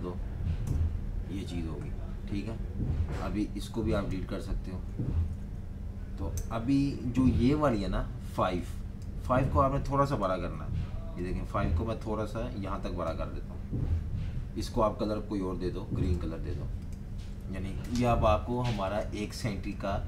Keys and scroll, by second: 0.6 Delete, 4.7 super+z, 6.2 BackSpace, 10.3 a, 17.3-19.0 typing, 17.8 super+-, 17.9 super+-, 18.1 super+-.